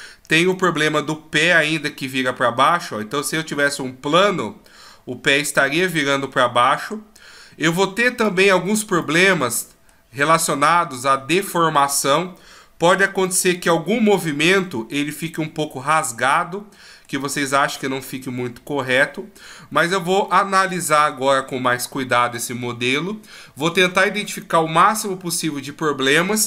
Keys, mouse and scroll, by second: 0.5 click, 9.0 middle click, 10.5 middle click, 17.4-18.0 scroll up 3, 18.0 scroll down 2, 18.9 middle click, 19.7-20.3 scroll down 1, 20.3 middle click, 20.3 scroll down 1.